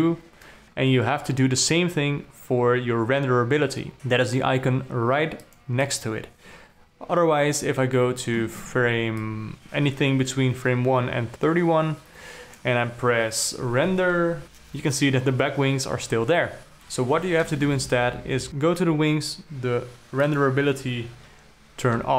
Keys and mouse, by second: 5.9 click, 6.3 click, 9.7 click, 11.9-13.1 drag, 14.4 F12, 18.1 shift+Left, 20.7 click.